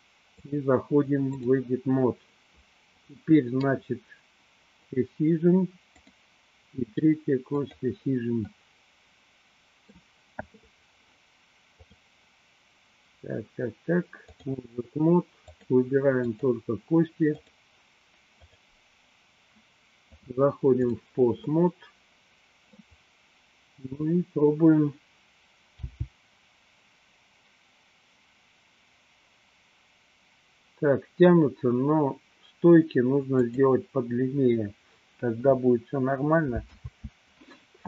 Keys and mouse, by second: 0.6-1.6 drag, 4.9 click, 6.2 click, 7.6 click, 8.6-10.2 middle drag, 11.9-14.6 drag, 15.7 click, 16.5 click, 17.6 click, 18.6 click, 20.4 click, 21.7-23.0 middle drag, 24.1 click, 25.7 g, 33.6 click, 36.7 ctrl+z.